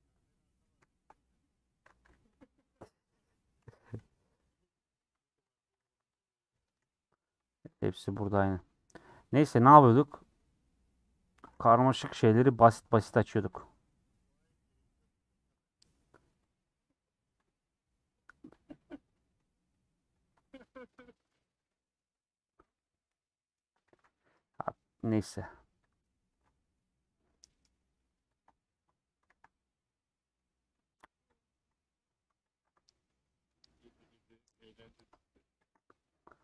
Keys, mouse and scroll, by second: 1.7 a, 2.5 u, 4.0 m, 5.5 Tab, 5.7 h, 6.2 Left, 6.8 /, 7.2 middle click, 7.6 Tab, 7.8 middle click, 8.3 3, 9.4 middle click, 9.9 2, 10.3-13.1 middle drag, 13.1 click, 13.6 click, 14.9 ctrl+click, 18.6 ctrl+click, 20.2 ctrl+click, 21.6-25.9 middle drag, 25.9 click, 26.0-28.4 middle drag, 28.4 ctrl+Left, 29.3 ctrl+z, 29.8-31.4 middle drag, 31.4 click, 31.7 middle click, 32.5 ctrl+click, 33.3-34.4 middle drag, 34.4 ctrl+click, 34.6 middle click, 35.6 ctrl+click, 35.9-36.4 middle drag.